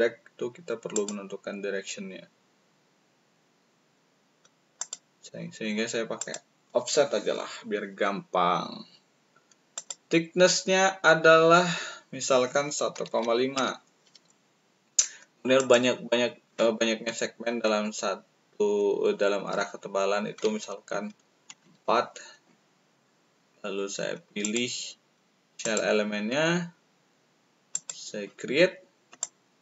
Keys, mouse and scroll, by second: 0.9 click, 6.1 click, 9.7 click, 12.8 1, 13.5 5, 15.5 click, 21.4 4, 24.3 click, 24.3 right click, 25.6 click, 27.7 click, 29.1 shift+click.